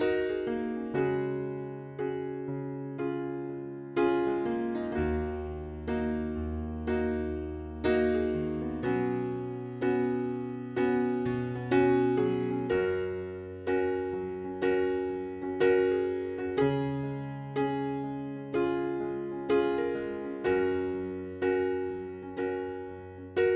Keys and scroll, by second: 1.8 0, 2.1 Return, 4.7 c, 7.2 5, 8.0 BackSpace, 8.3 6, 8.4 Return, 10.8 f, 11.2 z, 21.3 ctrl+z.